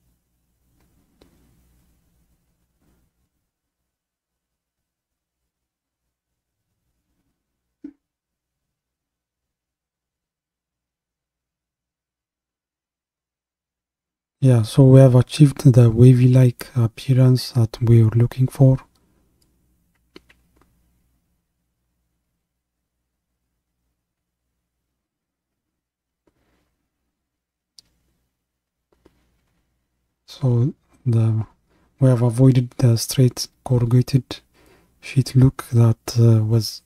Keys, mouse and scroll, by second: 1.8-6.0 drag, 6.0 ctrl+KP_3, 9.7 scroll up 2, 10.3-10.6 scroll up 2, 11.1-13.7 scroll down 1, 15.8-36.8 drag.